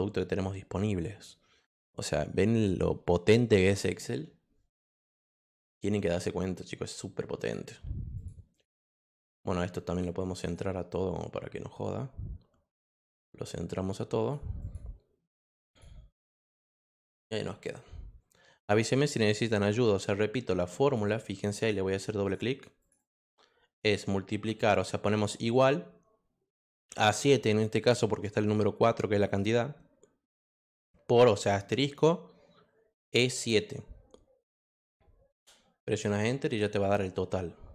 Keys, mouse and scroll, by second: 5.9 click, 7.4 click, 8.1 click, 8.5 click, 9.4 click, 10.4 click, 10.9-12.7 drag, 14.2 click, 14.6 click, 15.7 click, 16.6 click, 20.8 click, 21.0 click, 21.5 click, 22.2 click, 22.8 click, 22.9 click, 35.3 Return, 36.8 click.